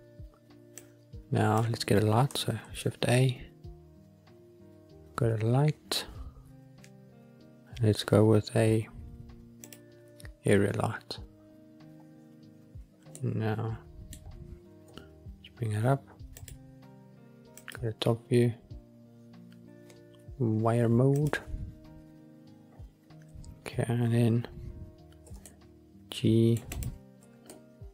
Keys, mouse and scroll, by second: 0.7 click, 2.5 shift+a, 13.0-14.2 middle drag, 14.8 g, 16.3-17.6 drag, 18.1-20.6 scroll down 4, 21.1 click, 22.2 scroll down 1, 22.7-24.2 scroll up 3, 25.2 g, 25.3 middle click, 26.6 click, 27.2 g, 27.4 middle click.